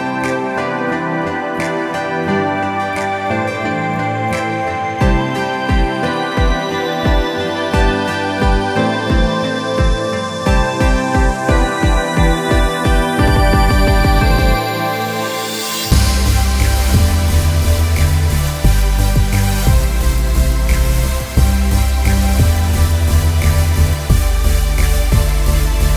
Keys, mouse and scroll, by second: 0.7 ctrl+alt+q, 1.6 Tab, 2.5 shift+click, 5.5 Return, 6.8 ctrl+click, 7.6 ctrl+click, 8.4 z, 10.0 click, 11.2 i, 13.2-17.1 drag, 22.5 ctrl+u, 24.1 click.